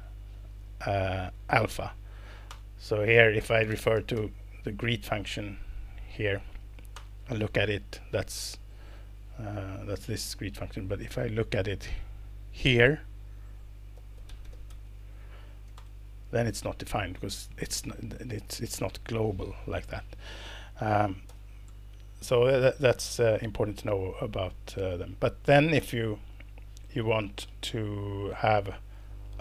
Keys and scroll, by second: 0.8 Escape, 1.8 Return, 2.5 Return, 3.1-4.4 typing, 6.9 ctrl+Return, 10.3 Escape, 13.7-15.3 typing, 15.8 ctrl+Return, 19.9 Escape, 20.4 Left, 21.3 super+l, 21.7 BackSpace.